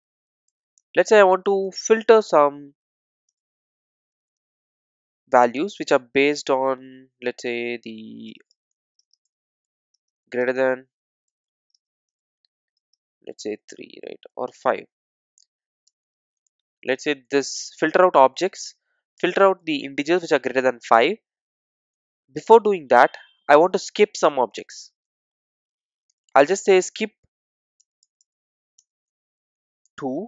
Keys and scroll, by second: 3.3 Return, 28.8 Return.